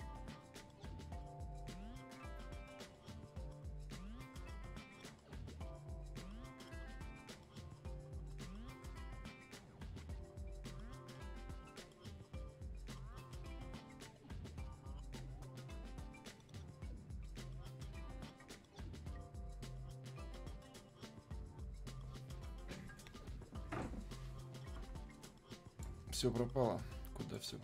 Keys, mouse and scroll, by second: 25.2-27.3 drag.